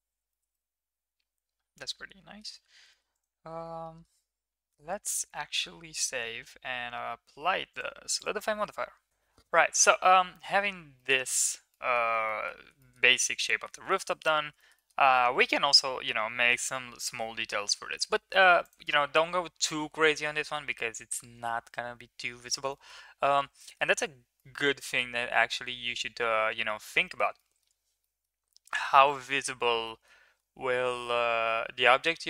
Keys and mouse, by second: 0.3 shift+middle click, 0.5-2.4 middle drag, 2.9 shift+middle click, 3.2 click, 3.3 Tab, 3.8 middle drag, 4.4 Tab, 5.3 ctrl+s, 7.8-8.2 drag, 8.6 middle click, 10.9 shift+middle drag, 11.7 middle click, 12.2 middle click, 12.7 shift+middle drag, 13.1-13.7 middle drag, 13.9 shift+middle click, 14.1 middle click, 14.5 shift+middle click.